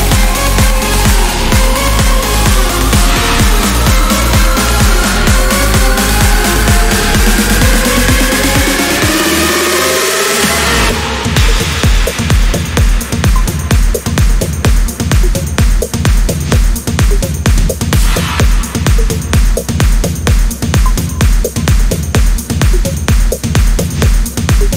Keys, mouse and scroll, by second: 1.0 click, 3.7-8.4 drag, 9.5 click, 9.9 0, 10.7 scroll down 1, 11.3 scroll up 1, 12.8-20.0 drag, 20.5 1, 21.3 scroll down 1, 21.8 scroll up 2, 23.1 0, 23.7 scroll down 1.